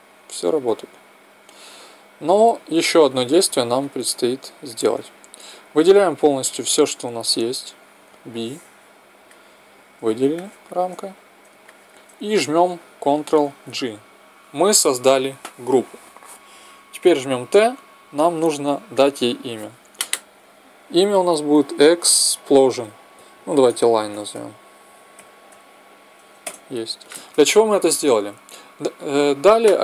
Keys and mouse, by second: 0.4-2.3 drag, 2.9-5.4 drag, 5.6-7.5 drag, 7.9 b, 10.2 middle click, 13.5 ctrl+g, 17.2 t, 18.8-20.3 drag, 23.1 s, 28.3 n.